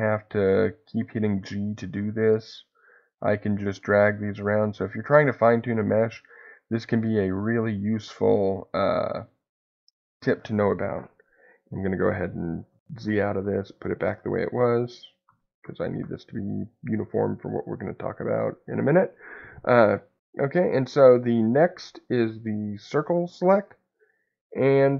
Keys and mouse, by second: 1.0 click, 2.6 click, 4.3 click, 5.8 click, 7.4 click, 9.2-10.3 drag, 11.9-16.5 ctrl+z, 21.7-24.8 drag.